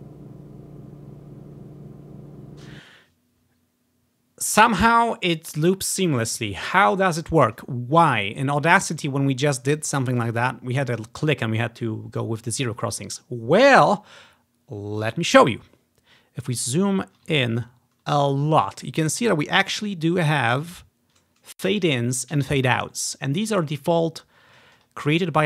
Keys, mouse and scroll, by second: 2.7 space, 15.1-17.0 ctrl+drag, 15.5-16.4 ctrl+scroll up 3, 17.8 scroll up 3, 19.4 click, 19.9 click, 25.1 click.